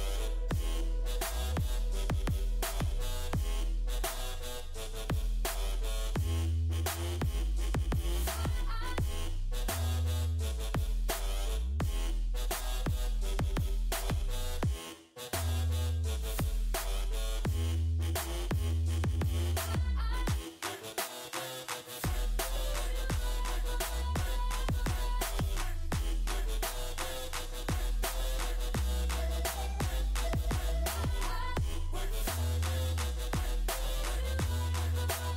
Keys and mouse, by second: 1.1 middle click, 2.4-3.4 drag, 2.4-7.7 right drag, 8.8 click, 8.8-12.8 right drag, 12.9 click, 13.7-16.4 middle drag, 16.4-18.0 drag, 18.0 right click, 18.1 middle click, 18.6 click, 25.6-34.4 drag, 28.7-34.4 middle drag.